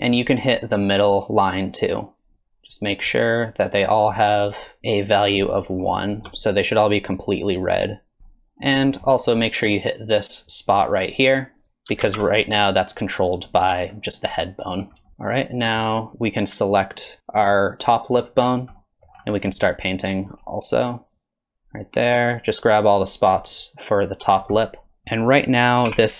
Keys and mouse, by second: 0.0 middle click, 0.2 shift+middle click, 0.4 middle click, 0.6 shift+middle click, 0.7 middle click, 1.0-2.4 drag, 2.4 click, 2.6 click, 3.2 click, 3.7 middle click, 3.9 shift+middle click, 4.0 click, 4.5 click, 4.8 click, 5.0 middle click, 5.3 click, 5.7 middle click, 5.9 shift+middle click, 6.0 click, 6.6 click, 6.9 middle click, 7.2 click, 7.4 click, 7.7 middle click, 8.0 click, 8.3 middle click, 9.1 middle click, 9.7-11.0 drag, 11.3 click, 12.0 ctrl+z, 12.6 click, 13.5 click, 15.3 middle click, 17.1 ctrl+click, 18.8 middle click, 19.2 middle click, 19.5 click, 20.0 click, 20.5 click, 20.7 middle click, 21.2 middle click, 21.5 click, 21.8 click, 22.1 click, 22.4 click, 22.8 middle click, 23.0 click, 23.4 middle click, 23.5 click, 23.9 click, 24.1 click, 24.6 middle click, 24.9 middle click, 25.9 r.